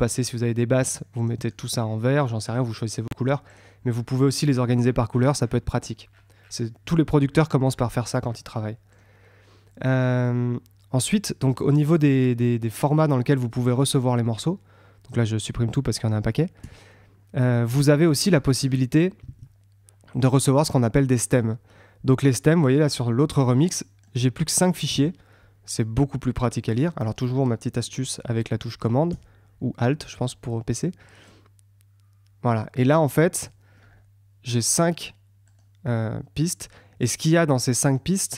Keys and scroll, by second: 13.6 super+q, 19.2 super+Tab, 24.9 super+Tab.